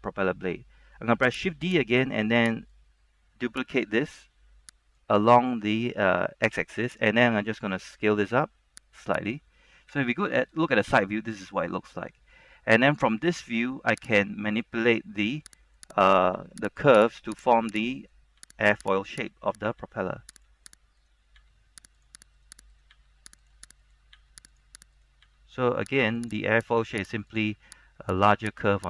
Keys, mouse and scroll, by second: 0.0 middle click, 1.9 right click, 1.9 shift+d, 2.9-4.0 drag, 5.1 ctrl+z, 5.1-7.1 drag, 8.0 s, 9.3 click, 10.0 KP_3, 11.1-11.6 scroll up 1, 11.8 shift+middle click, 14.2 right click, 15.4 g, 15.9 click, 16.3 right click, 16.5 g, 16.8 click, 17.2 right click, 17.5 g, 17.7 click, 18.1 right click, 18.5 g, 18.9 click, 19.2 right click, 20.0 g, 20.5 click, 20.8 right click, 21.5 g, 22.1 click, 22.5 right click, 23.0 g, 23.5 click, 24.0 right click, 24.3 g, 24.6 click, 25.0 right click, 25.4 g, 26.3 click, 26.7 right click, 27.0 g, 27.4 click, 28.2 right click, 28.6 g.